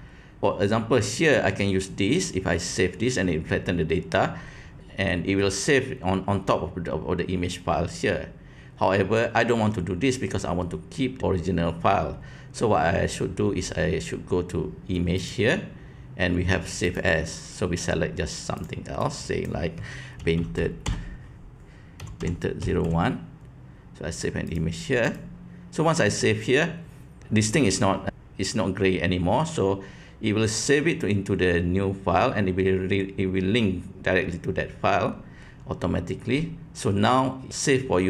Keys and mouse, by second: 15.1-17.0 drag.